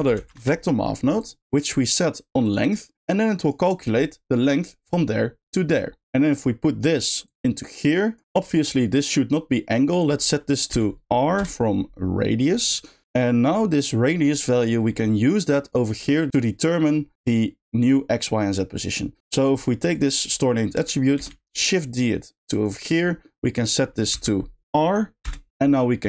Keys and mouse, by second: 3.0-3.5 drag, 7.2-8.2 drag, 10.0-11.4 drag, 12.7 middle click, 13.1 middle click, 14.3 middle click, 14.8 middle click, 19.3 middle click, 19.9 click, 22.9 shift+middle click, 23.8-25.2 shift+drag, 25.5 g, 25.7 middle click.